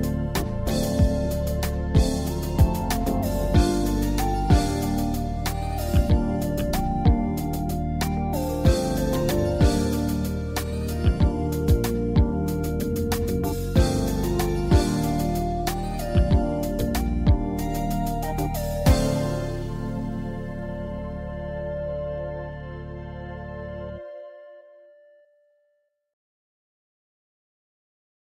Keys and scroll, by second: 11.9 ctrl+r.